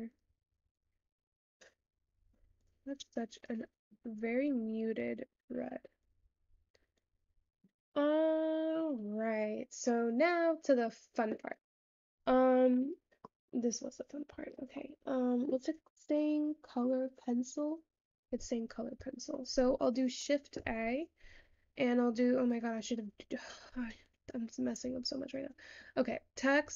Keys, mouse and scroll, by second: 0.0 click, 1.8 click, 3.6 click, 8.6-12.2 scroll down 3.